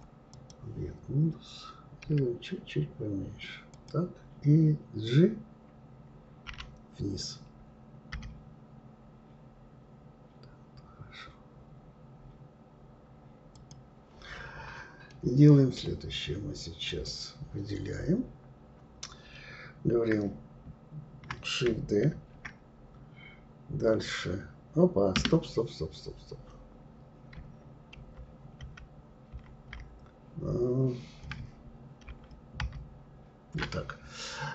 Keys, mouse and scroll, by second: 2.0 s, 6.4 g, 15.1-16.8 middle drag, 16.8 click, 22.1 shift+d, 27.9 ctrl+z, 28.7 ctrl+z, 29.8 ctrl+z, 32.1 ctrl+shift+z, 32.6 ctrl+shift+z.